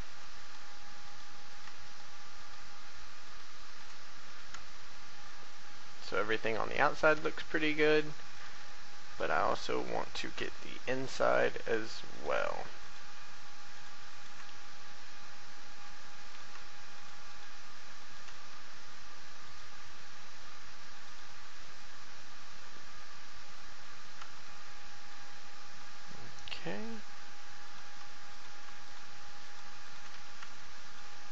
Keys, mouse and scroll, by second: 0.4 right click, 1.8 shift+right click, 2.4 shift+right click, 3.2 shift+right click, 3.6 shift+right click, 4.1 shift+f, 4.7 shift+middle click, 5.6-6.1 scroll down 1, 6.3 shift+middle click, 8.3 right click, 9.1 shift+right click, 10.4 shift+f, 11.3 right click, 12.8 shift+right click, 13.7 shift+right click, 14.1 shift+right click, 14.4 shift+f, 16.2 right click, 16.9 shift+right click, 18.0 shift+right click, 18.5 shift+f, 19.4 right click, 20.4 a, 21.0 right click, 21.8-24.2 drag, 24.3 shift+middle click, 25.8 middle click, 27.6 right click, 28.3 right click, 28.8 shift+right click, 29.4 shift+right click, 29.8 shift+right click, 30.1 shift+f, 30.6 shift+middle click.